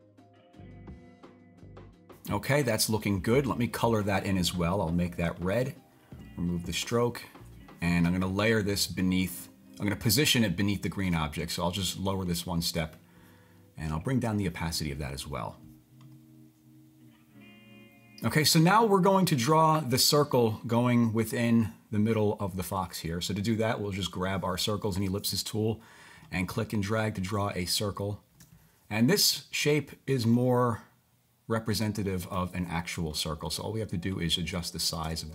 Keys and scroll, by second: 1.6 typing, 3.2-3.9 typing, 5.4-6.2 typing.